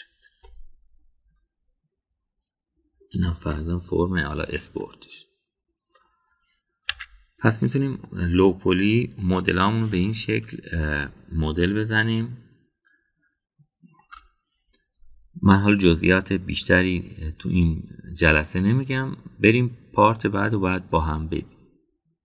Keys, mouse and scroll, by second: 0.9 click, 1.5-4.2 middle drag, 4.4 Tab, 5.7-7.0 middle drag, 7.9 /, 9.0-10.2 middle drag, 13.0-15.0 shift+middle drag.